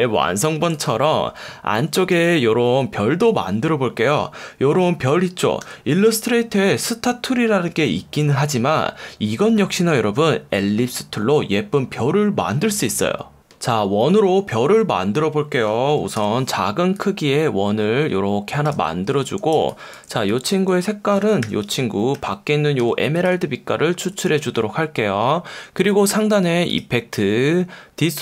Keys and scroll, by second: 2.1 F1, 5.6 F1, 16.2 l, 19.0 v, 19.4 space, 19.9 super+space, 21.4 i, 22.2 F1, 22.8 F1, 24.0 v, 26.1 F1.